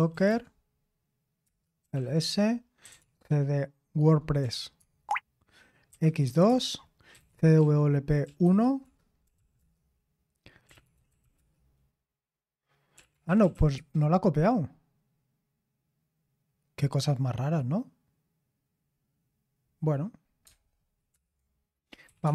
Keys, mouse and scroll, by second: 0.0-4.4 typing, 5.9-13.9 typing, 21.1 super+Return, 21.8-22.3 typing.